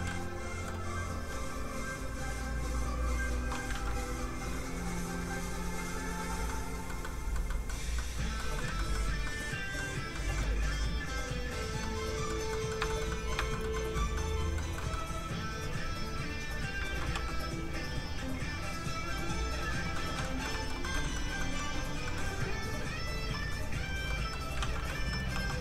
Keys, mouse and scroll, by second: 0.1 middle click, 1.4 click, 3.7 ctrl+z, 4.2 z, 4.3 click, 6.5 middle click, 10.9 click, 11.8 middle click, 12.9 shift+middle click, 13.1 middle click, 13.2 middle click, 13.5 shift+middle click, 13.7 middle click, 13.8 middle click, 14.8 shift+middle click, 15.8 shift+click, 15.9 click, 16.8 ctrl+z, 17.2 f, 17.6 click, 17.9 f, 18.1 click, 19.9 middle click, 20.5 shift+middle click, 21.0 shift+middle click, 21.4 middle click, 21.5 middle click, 21.7-22.1 scroll up 1, 22.1 middle click, 22.6 click, 24.1 middle click, 24.6 ctrl+z, 25.0 middle click, 25.3 f, 25.5 click.